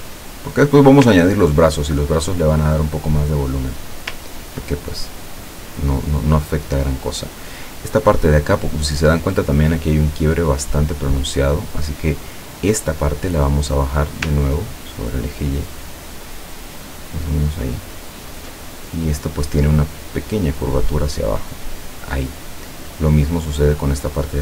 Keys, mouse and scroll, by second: 1.5-1.8 ctrl+scroll up 2, 2.7 ctrl+middle click, 4.4 ctrl+scroll down 2, 10.9 click, 13.9-18.7 drag, 19.9-22.5 drag.